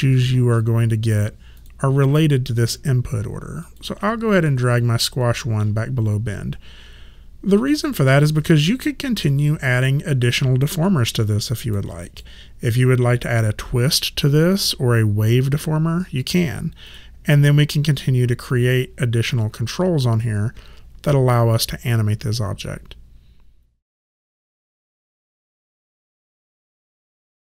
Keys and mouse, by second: 1.6 click, 3.7 click, 4.5 middle click, 7.7 click, 9.3 alt+click, 10.3 alt+right click, 10.8 alt+middle click, 12.0 click, 16.9 click.